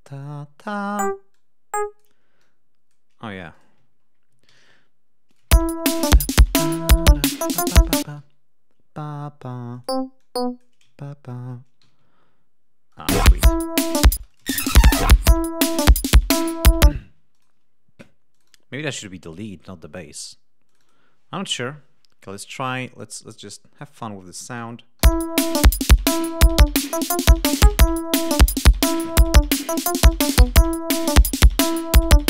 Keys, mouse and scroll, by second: 0.8 click, 1.3 click, 2.3 click, 3.3 g, 3.5 click, 3.9 ctrl+scroll down 2, 4.4 ctrl+alt+d, 5.2 ctrl+click, 5.4 space, 5.6 ctrl+scroll up 2, 8.0 space, 8.2 d, 9.7 click, 10.2 click, 11.2 shift+right click, 11.8 shift+g, 12.0 ctrl+shift+scroll down 2, 12.9 click, 13.0 space, 14.1 space, 14.3 click, 16.9 space, 17.3 click, 18.3 click, 19.5 Escape, 20.8 click, 23.5 click, 24.9 l.